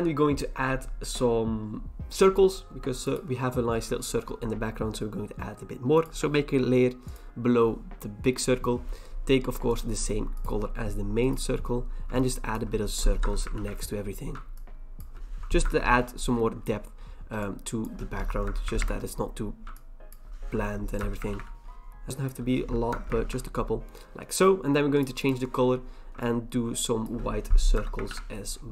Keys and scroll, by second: 13.2 alt+BackSpace, 13.5 ctrl+d, 15.6 alt+BackSpace, 15.9 ctrl+d, 18.4 alt+BackSpace, 18.8 ctrl+d, 21.0 alt+BackSpace, 21.3 ctrl+d, 22.9 alt+BackSpace, 23.2 ctrl+d, 27.7 alt+BackSpace, 28.1 ctrl+d.